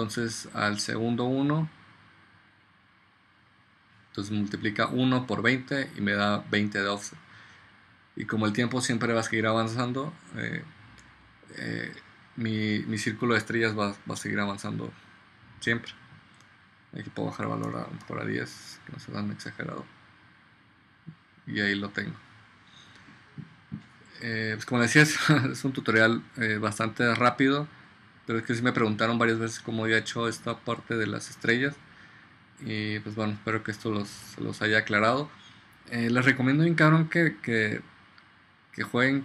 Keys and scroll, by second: 17.8 BackSpace, 18.1 1.